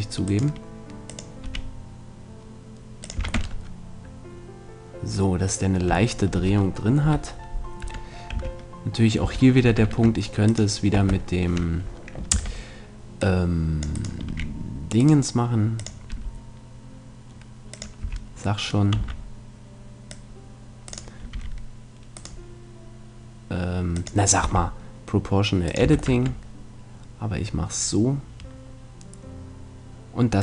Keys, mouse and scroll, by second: 0.4-2.1 right drag, 1.1-3.0 drag, 1.4 r, 3.2 click, 3.2 a, 3.4 Tab, 3.6-4.6 middle drag, 4.6 middle click, 5.2-6.3 middle drag, 7.0 KP_7, 7.8 Tab, 8.4 a, 9.2 a, 9.8 ctrl+Tab, 12.3 c, 12.5 middle click, 14.0-16.8 right drag, 14.3 r, 15.8-16.8 drag, 16.1 r, 16.8 right click, 17.0 click, 17.8-19.8 drag, 18.0 a, 19.0 c, 20.9-22.8 drag, 21.4 r, 22.4-24.2 right drag, 24.0-25.7 drag, 24.4 r, 25.8 a, 26.1 Tab, 26.2-27.7 middle drag.